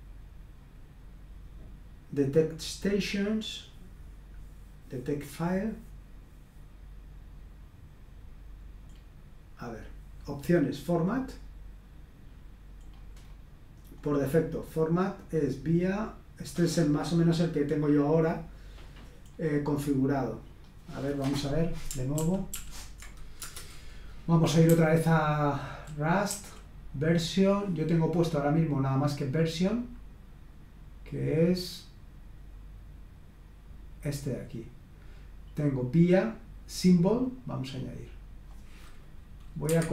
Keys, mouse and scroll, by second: 2.7-7.6 scroll down 2, 8.2-9.3 scroll up 2, 9.3-11.9 scroll up 1, 11.9-12.9 scroll down 2, 12.9-14.0 scroll down 1, 14.0-18.3 scroll up 3, 19.2-20.9 scroll up 2, 20.9 click, 22.2 ctrl+p, 22.5 ctrl+p, 23.4 Return, 24.6-26.8 typing, 28.2-37.2 scroll up 1, 37.2-38.6 drag, 39.6 Escape.